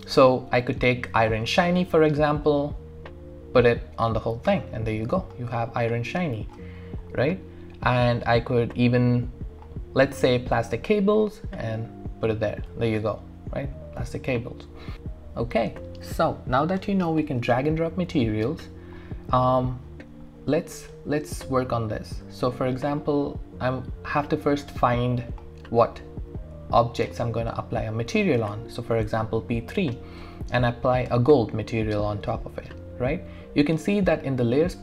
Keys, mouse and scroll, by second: 1.4-4.2 drag, 4.2 scroll down 1, 4.4 typing, 4.6 scroll up 1, 5.3-6.7 alt+drag, 6.7 alt+scroll up 1, 6.8 alt+middle click, 7.5-7.9 scroll down 1, 7.9-8.6 scroll up 1, 8.6-9.1 scroll down 1, 9.1-10.7 scroll up 1, 10.7-12.9 drag, 12.9-14.9 alt+drag, 16.1 alt+click, 16.3 alt+middle click, 17.0-17.3 scroll up 1, 17.3 scroll down 1, 18.6-20.5 scroll up 1, 21.7 click, 30.2-33.4 drag.